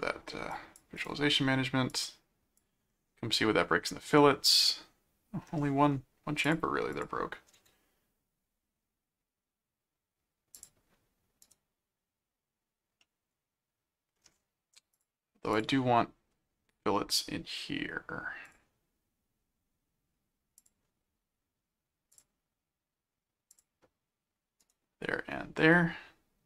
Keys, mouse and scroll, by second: 0.5 click, 1.9 click, 4.2 middle click, 6.4 click, 10.5 click, 11.4 right click, 13.0-14.2 middle drag, 15.0 click, 15.6 click, 18.5 click, 20.6 click, 22.1 click, 23.5 click, 24.6 right click.